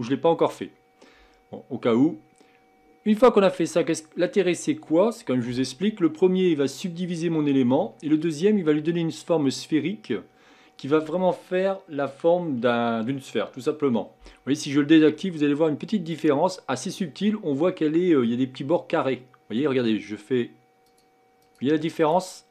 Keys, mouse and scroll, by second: 4.4 scroll up 4, 5.5 KP_1, 16.1 click, 20.8 click, 22.0 click.